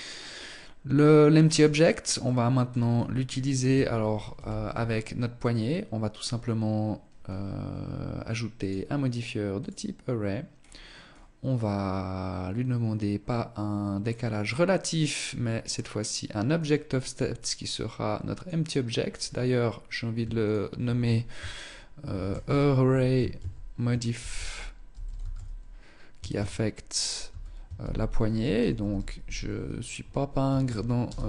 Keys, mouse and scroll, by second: 1.0 right click, 1.5 middle click, 2.2-2.7 scroll down 5, 3.6 KP_1, 5.4 right click, 7.8 click, 9.9-11.0 scroll down 4, 11.0 scroll down 2, 13.4 click, 15.0 click, 15.8 click, 19.4 ctrl+click.